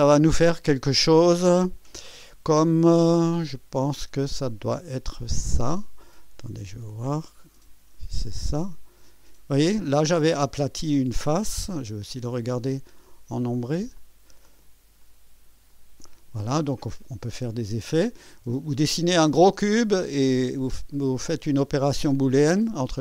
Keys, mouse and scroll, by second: 1.8 click, 5.3-8.8 drag, 9.6 click, 13.0 click, 14.0 click, 15.0 ctrl+click, 15.7 ctrl+click, 16.5-18.7 ctrl+drag, 22.1-23.0 drag.